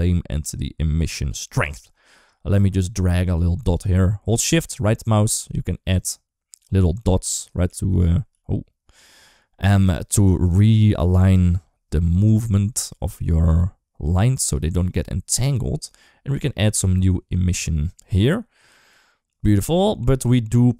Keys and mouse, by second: 1.9 shift+middle click, 3.1 middle click, 4.8 shift+right click, 7.0 click, 7.5 g, 8.6 ctrl+z, 9.7 click, 9.8 click, 10.8 click, 11.8 shift+middle click, 12.2 g, 15.8-18.1 drag.